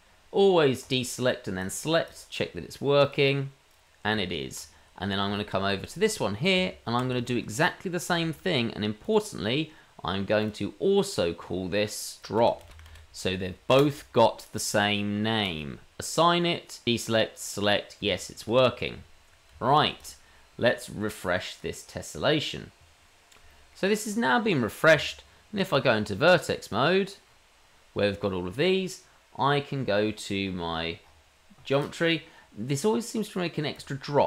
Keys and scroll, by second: 4.1 Tab, 6.5 Tab, 7.4 Tab, 8.3 Tab, 18.0 Tab, 24.9 Tab.